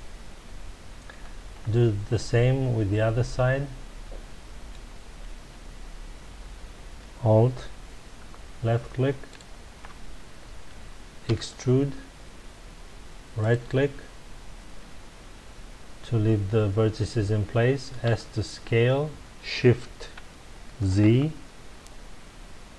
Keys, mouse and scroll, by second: 1.6-2.1 scroll down 2, 2.1-5.1 middle drag, 5.3 scroll up 1, 9.3 alt+click, 11.2 e, 13.5 right click, 18.0 s.